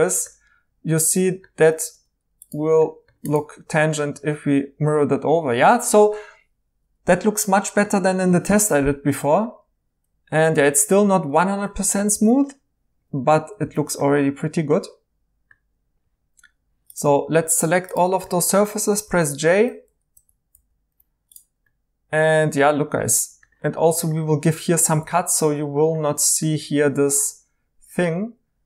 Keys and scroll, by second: 12.3 e, 14.0 e, 18.9 h, 20.1 ctrl+z, 20.5 j, 24.3-25.0 typing.